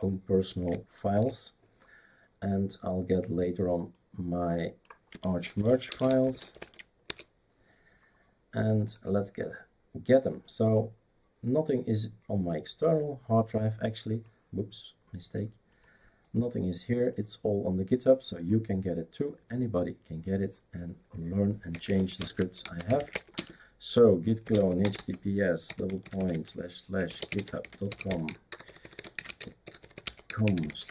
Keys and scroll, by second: 0.0-0.4 typing, 1.1 Return, 5.0-7.1 typing, 21.4-30.9 typing.